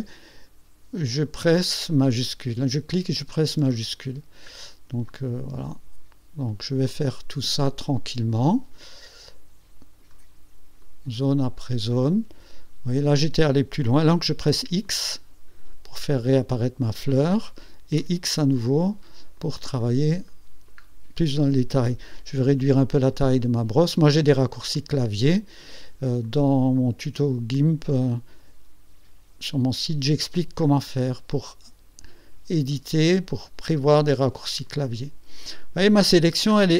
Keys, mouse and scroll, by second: 1.3 click, 3.2 shift+click, 4.0 shift+scroll down 2, 4.0 shift+click, 4.2 middle click, 5.2-8.8 drag, 8.9-10.3 drag, 10.9-13.2 drag, 14.6 x, 14.9-17.0 drag, 18.1 x, 18.4-19.4 drag, 19.5 click, 20.4 middle click, 20.4 scroll down 2, 20.8 scroll up 2, 25.3-25.7 ctrl+scroll up 2, 26.3-29.7 drag, 30.0-34.6 drag, 34.8-36.1 drag, 36.2 middle click.